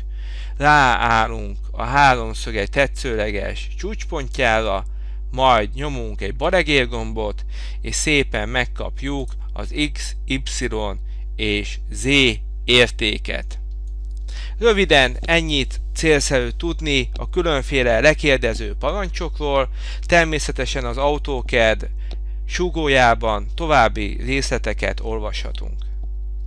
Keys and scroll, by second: 26.4 F10.